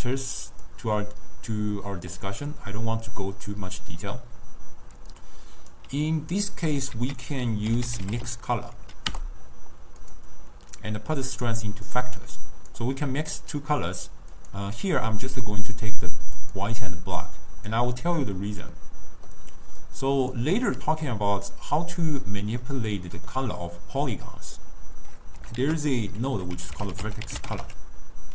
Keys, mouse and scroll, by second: 0.7-3.8 drag, 5.0 d, 5.2 right click, 5.9 d, 7.0 ctrl+a, 10.9 drag, 12.4 click, 14.4 click, 16.5 click, 18.9-19.9 middle drag, 19.9 click, 20.8-21.6 middle drag, 21.6 click, 22.4-24.8 middle drag, 24.8-25.7 scroll up 1, 25.7 ctrl+a.